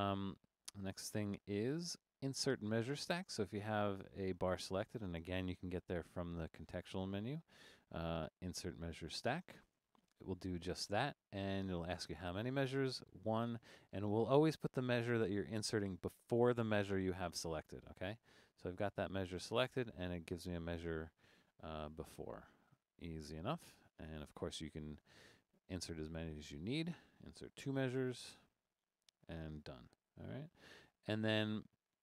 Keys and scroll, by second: 22.6 super+z, 27.6 2, 30.0 super+z.